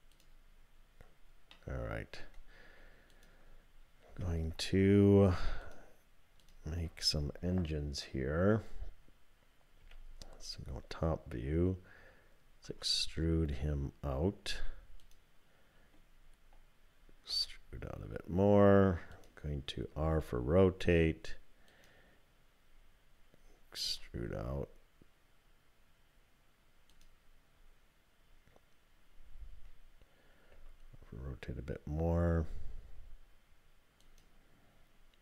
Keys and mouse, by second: 1.5 click, 3.1 click, 4.1 3, 5.6 click, 6.4 shift+click, 9.8 KP_7, 12.6 e, 17.3 e, 19.9 r, 23.9 e, 30.5-31.0 typing.